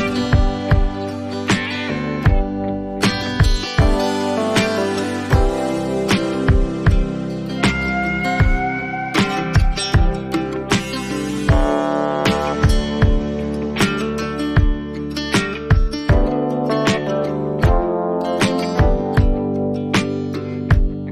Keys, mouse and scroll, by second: 2.4 click, 7.3 click, 10.4 click, 12.8 click, 15.2 ctrl+z, 16.0 ctrl+z.